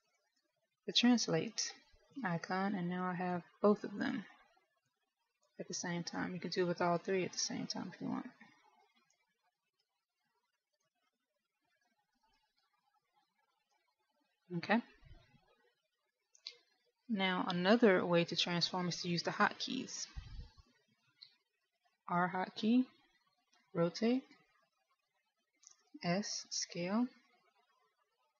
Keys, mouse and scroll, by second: 1.1 shift+click, 4.1 click, 5.9 click, 7.1 click, 10.9 click, 11.1 ctrl+z, 11.3 ctrl+z, 12.1 z, 13.3 z, 23.1 r, 27.1 s.